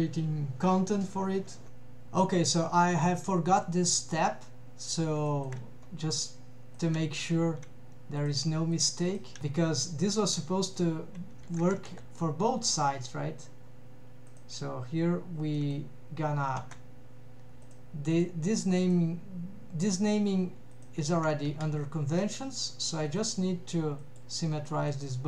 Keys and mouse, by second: 2.9 middle click, 3.9 middle click, 5.3 shift+middle click, 8.2 click, 9.2 drag, 9.4 a, 10.2 alt+a, 10.7 click, 11.6 ctrl+Tab, 14.4 click, 15.6 middle click, 16.7 Tab, 17.6 click, 18.8 click, 21.5 a, 23.1-24.5 right drag, 24.7 middle click.